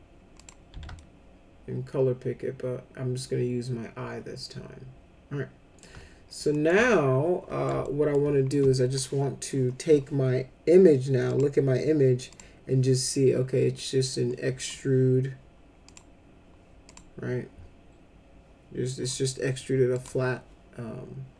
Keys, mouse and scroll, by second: 0.4 click, 0.7 z, 0.9-5.8 alt+middle drag, 6.5 middle click, 6.9 alt+middle click, 7.8 alt+middle click, 11.2 click, 12.3 click, 15.8 click, 16.9 click, 19.9 click.